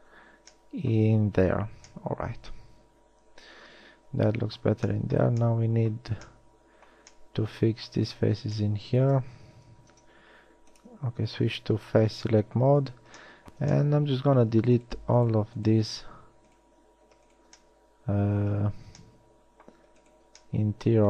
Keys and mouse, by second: 0.2 f, 1.9 a, 9.9 ctrl+Tab, 12.2 z, 18.0 middle click, 18.6 middle click, 20.2 middle click.